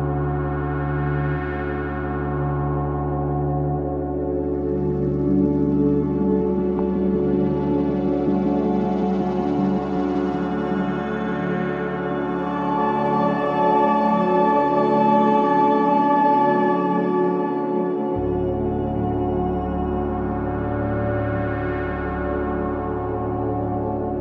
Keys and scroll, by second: 4.0 ,, 5.1 ,, 6.1 ,, 10.9 shift+i, 12.9 shift+i, 13.9 shift+i, 16.3 Delete, 17.0 shift+i.